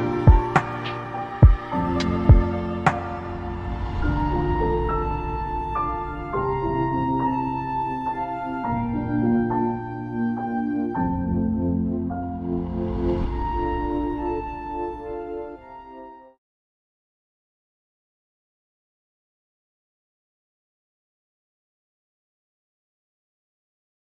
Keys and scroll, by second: 0.8 ctrl+z.